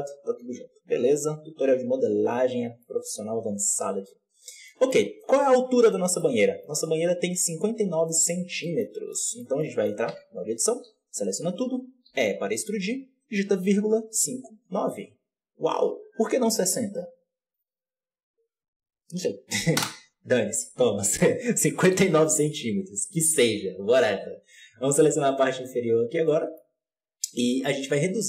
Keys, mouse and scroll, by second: 0.5 Tab, 1.9 Tab, 2.0-2.6 scroll down 1, 2.6 alt+a, 2.7-3.7 middle drag, 3.7 right click, 4.3-4.6 scroll down 3, 4.6 shift+middle click, 5.3 KP_7, 5.8-7.8 shift+middle drag, 7.8 scroll down 1, 8.0 shift+middle click, 8.8 scroll up 1, 9.0-10.0 middle drag, 10.0 Tab, 10.8 a, 12.0 e, 21.8 KP_1, 22.0 z, 23.0 click, 24.0 b, 25.4 alt+a, 25.6 click, 26.2-27.4 middle drag, 27.4 KP_7.